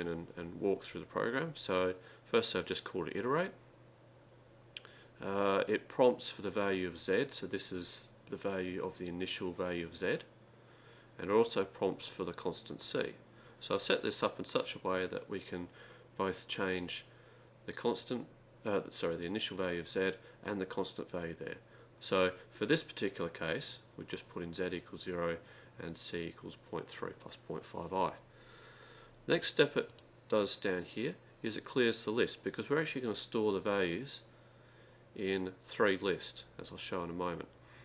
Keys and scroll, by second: 0.0-0.2 typing, 30.7 Left, 35.0 Left, 37.1 x.